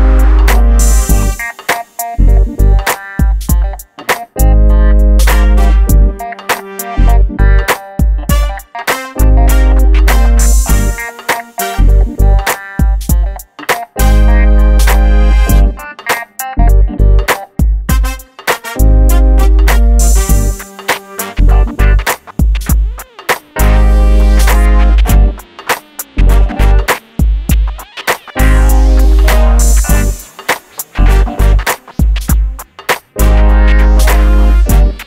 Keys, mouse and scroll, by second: 0.5 click, 1.4 click, 2.6 p, 2.8 click, 4.4 middle click, 5.4 click, 6.4 p, 6.8 click, 9.9 g, 10.8 click, 11.7 scroll down 1, 12.7 scroll up 1, 13.9 m, 14.4 click, 17.8-18.1 scroll up 1, 18.9 click, 20.4 KP_1, 20.6 KP_0, 21.5-23.4 drag, 23.4 p, 24.3 click, 27.5 KP_1, 28.3 scroll down 1, 28.9 click, 31.4 p, 32.5 click.